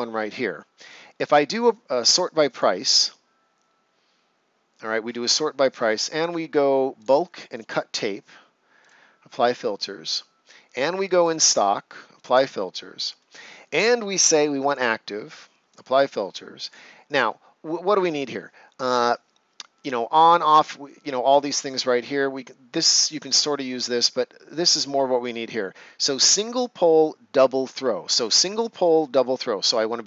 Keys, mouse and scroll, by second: 2.5 click, 5.0 scroll down 1, 5.8 scroll up 1, 6.9 click.